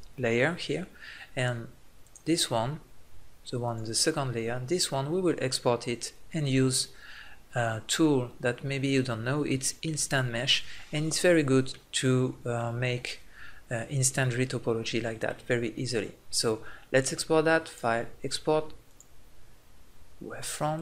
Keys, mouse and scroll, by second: 2.0 middle click, 3.5 click, 4.8-5.9 middle drag, 6.8-9.0 middle drag, 11.0 middle click, 14.6-17.6 middle drag, 17.6-19.3 drag.